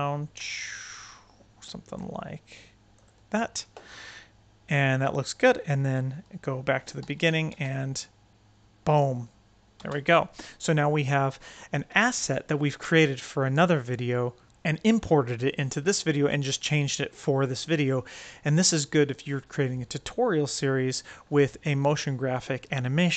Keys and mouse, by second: 7.0 shift+x, 7.4 space, 9.7 space.